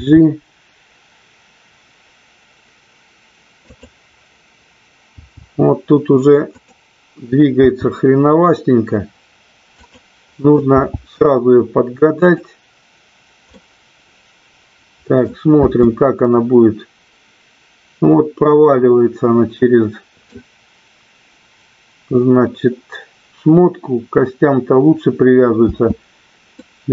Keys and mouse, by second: 0.0 g, 3.8 click, 5.1 g, 7.7 g, 9.9 click, 10.6 g, 13.5-15.3 middle drag, 15.5 space, 18.9-21.0 middle drag, 26.1 space, 26.5-26.9 middle drag.